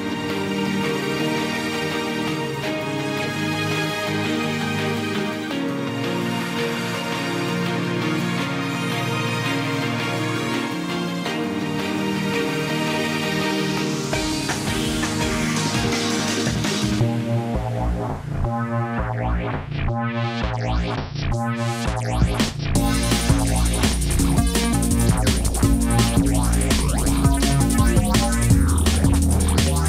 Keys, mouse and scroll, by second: 8.3 ctrl+g, 28.5 ctrl+d.